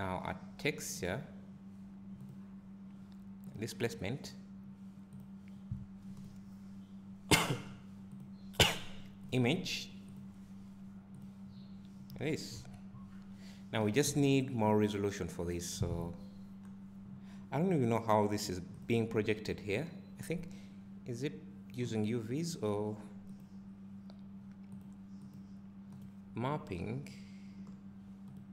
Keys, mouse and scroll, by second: 12.6 KP_Decimal, 14.1 `.